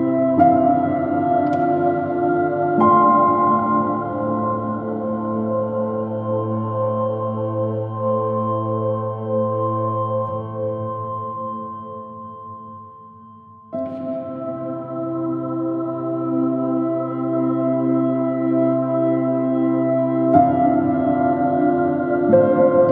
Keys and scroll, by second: 3.8 super+Right, 13.9 super+-, 14.4 super+i, 14.7 space, 16.8 alt+shift+super+e, 19.6 s.